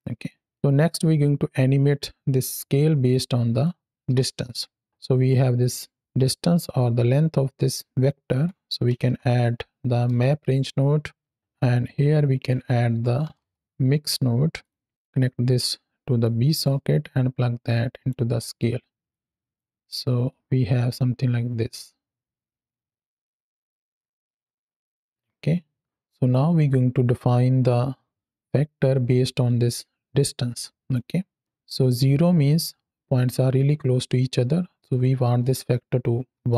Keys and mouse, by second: 0.1 click, 1.4-2.7 drag, 3.0-4.4 drag, 5.1-8.3 drag, 11.7 click, 14.5 click, 16.1 click, 16.9-18.0 drag, 18.2 middle click, 19.0 click, 20.2-26.2 drag, 29.2-30.8 drag, 31.3 middle click, 34.8-36.3 drag.